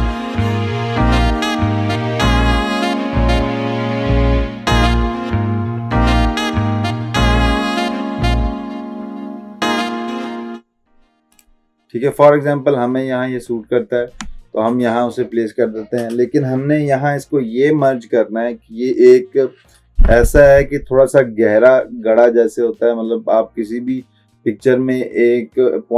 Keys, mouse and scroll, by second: 1.4 click, 1.7 ctrl+z, 2.5 ctrl+z, 3.0 ctrl+alt+z, 3.3 ctrl+click, 3.9 click, 4.3 ctrl+t, 4.5-4.9 shift+click, 5.4 shift+click, 5.6 click, 5.8 shift+click, 6.4 shift+click, 6.8-9.2 drag, 7.4-8.9 drag, 9.2 ctrl+t, 9.5 shift+click, 11.4 click.